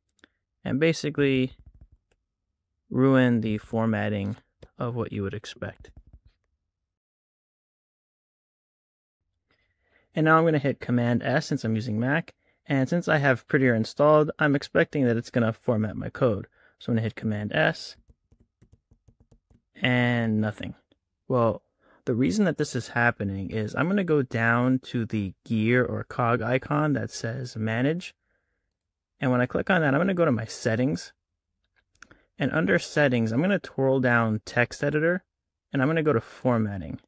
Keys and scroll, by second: 4.9 BackSpace, 5.7 Left, 5.8 Tab, 8.3 Tab, 17.2 super+s.